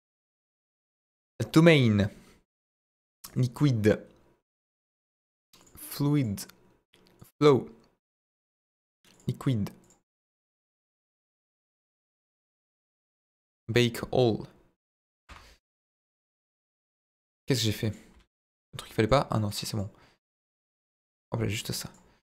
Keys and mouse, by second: 0.5-1.8 drag, 2.5-3.3 drag, 5.6 click, 6.2-7.3 drag, 8.2-9.2 drag, 9.8 click, 11.9-12.5 drag, 13.3-15.4 drag, 16.1 click, 17.3 middle drag, 18.1 z, 18.8 middle drag, 19.3 middle click, 20.3-21.9 drag.